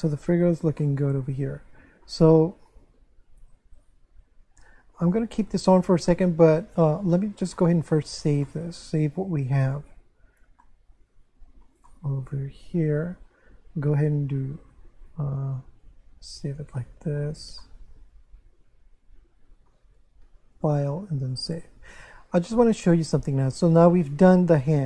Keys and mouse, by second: 0.8 shift+middle click, 5.0 click, 7.5 shift+middle click, 8.4 shift+middle click, 10.6 ctrl+middle click, 11.9 shift+middle click, 15.8 click, 17.6 ctrl+middle click, 20.5 click, 24.6 shift+middle click.